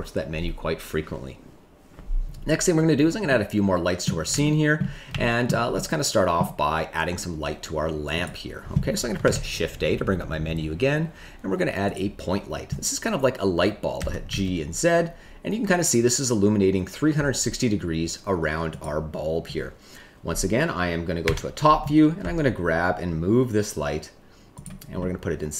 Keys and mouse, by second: 3.2 middle click, 4.4 shift+middle click, 5.1 shift+middle click, 5.7 middle click, 8.1 click, 9.2 shift+a, 13.9 g, 14.2 z, 18.7 click, 21.2 KP_7, 22.1 g, 24.5 click, 24.9 middle click.